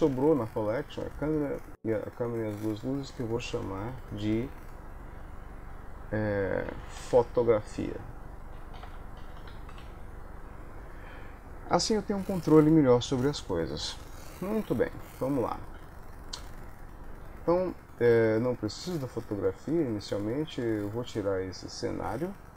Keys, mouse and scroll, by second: 2.4 click, 2.6 click, 12.0 middle click, 13.1 KP_1, 14.2 shift+middle click, 15.0 ctrl+middle click, 15.8 ctrl+s, 18.8 click, 22.0 click.